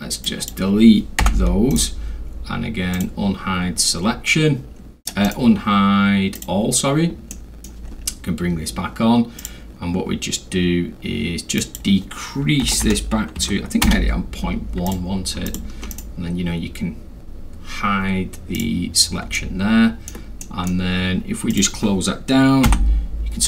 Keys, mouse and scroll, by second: 0.2 click, 1.2 Delete, 1.7 right click, 2.9 click, 5.2 right click, 6.3 click, 7.3-7.6 middle drag, 7.9 scroll up 2, 8.0-8.5 scroll, 8.5 middle click, 9.4 click, 11.6 click, 12.6 0, 13.4 1, 13.8 Return, 14.9 click, 15.5 ctrl+click, 15.9 ctrl+right click, 18.5 click, 19.4-20.1 alt+middle drag, 20.4 alt+middle click, 21.5 click, 22.7 m.